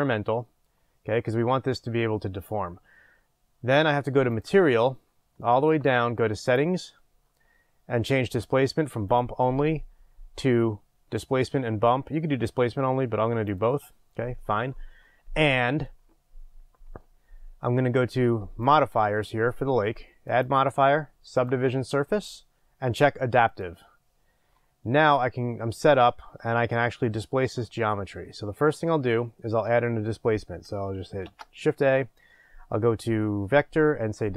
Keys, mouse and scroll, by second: 13.6-23.7 drag, 15.6-18.6 scroll up 1.